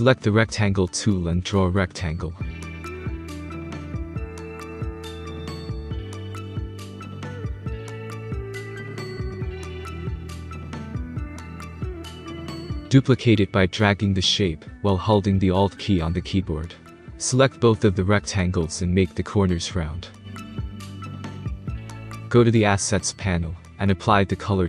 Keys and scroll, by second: 3.4-5.1 typing, 12.4-13.1 space.